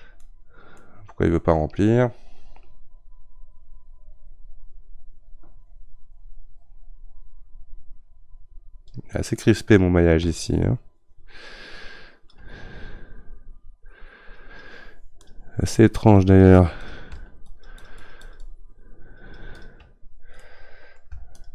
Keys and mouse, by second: 0.2-2.6 middle drag, 2.6-9.3 drag, 9.4-10.5 middle drag, 10.5-20.4 shift+drag, 20.4 middle click, 21.3-21.5 shift+drag.